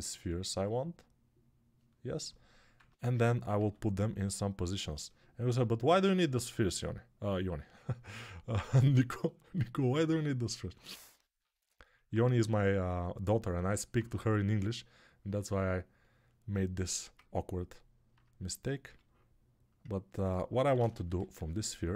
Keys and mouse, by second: 2.6 Tab, 3.4 s, 5.3-9.8 drag, 5.3 g, 6.5 s, 9.8-13.3 ctrl+alt+right drag, 11.0 g, 13.3-15.1 alt+middle drag, 18.7 g, 20.3-21.9 ctrl+right drag, 20.4 ctrl+z.